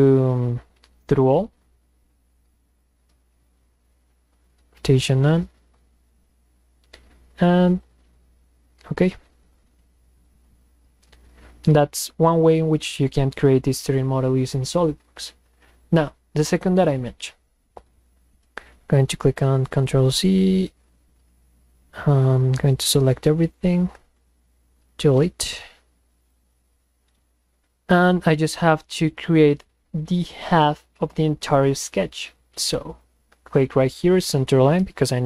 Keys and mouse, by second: 1.0 click, 2.7 click, 7.8 click, 19.4 ctrl+z, 22.4-23.2 drag, 26.2 click, 32.9 click, 34.1 click.